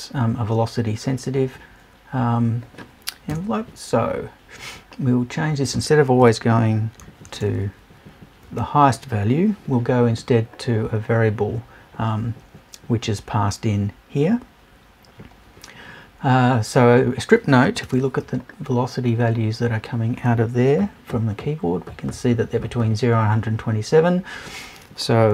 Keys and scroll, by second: 3.3 BackSpace, 6.2 BackSpace, 7.0 shift+BackSpace.